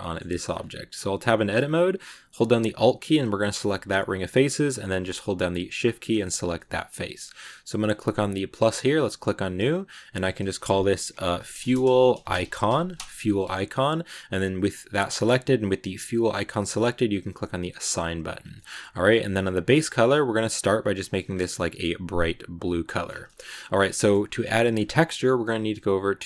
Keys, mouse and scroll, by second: 0.4 scroll up 1, 0.5 Tab, 1.2 middle click, 1.6-3.5 scroll up 1, 3.5 alt+right click, 3.9 scroll down 2, 4.1-5.7 middle drag, 5.7 shift+right click, 6.4-7.7 shift+middle drag, 7.7-9.6 drag, 9.7-12.8 drag, 16.7-17.7 drag, 17.7 middle click, 18.0 Tab, 18.4-19.4 middle drag, 19.4 click, 22.8 middle click, 22.9 scroll down 2, 23.1-26.2 shift+middle drag.